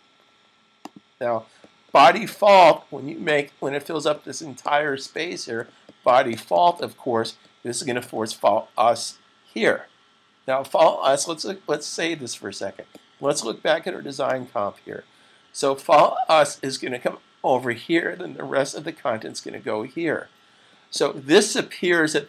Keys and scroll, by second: 4.6 super+s, 11.2 super+s.